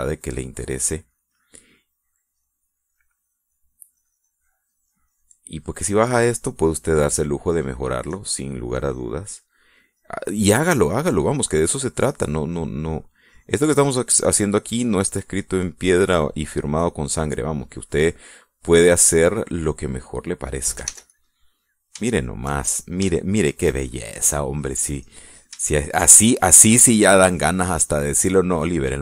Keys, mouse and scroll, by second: 1.1 click, 2.1 click, 2.9 click, 4.1 click, 5.0-6.1 drag, 6.2 click, 7.3 middle click, 7.9 middle click, 9.4-10.5 middle drag, 10.8-13.9 drag, 14.0 click, 14.9 middle click, 15.6-18.4 drag, 18.6-20.5 drag, 20.6 middle click, 22.0 ctrl+s, 22.2 ctrl+click, 22.7 ctrl+middle click, 24.3 shift+click, 25.3 shift+click, 25.4-26.6 middle drag, 27.0 shift+middle click, 27.6 shift+middle click, 28.0-29.0 shift+middle drag.